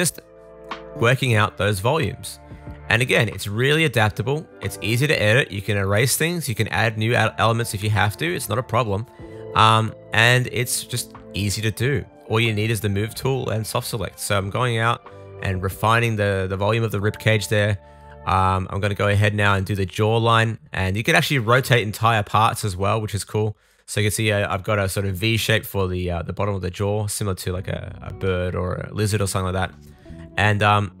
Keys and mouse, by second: 0.0 middle click, 1.2 super+z, 6.2 click, 6.9 middle click, 7.1 click, 9.3-11.0 middle drag, 13.0 shift+middle click, 14.0 right click, 14.1 shift+click, 15.0 super+s, 15.7 super+s, 15.9 Tab, 16.6 middle click, 17.8 middle click, 18.0 super+s, 19.0 a, 19.2 r, 19.9 super+z, 20.0 super+z, 20.2 middle click, 20.5 r, 20.8-22.0 shift+drag, 22.0 shift+middle click, 22.0 shift+click, 22.4 middle click, 23.2 super+z, 23.2 shift+click, 23.7 click, 24.3 middle click, 24.5 super+z, 24.7 shift+click, 25.0-26.3 middle drag, 26.3 click, 26.5 middle click, 26.8 click, 26.9 middle click, 27.1 click, 27.2 shift+middle click, 27.8 click, 28.0 middle click, 28.3 click, 28.4 middle click, 28.6 click, 28.7 middle click, 29.1 super+z, 29.4 click, 29.5-30.5 middle drag, 30.3 r, 30.5-31.0 shift+drag.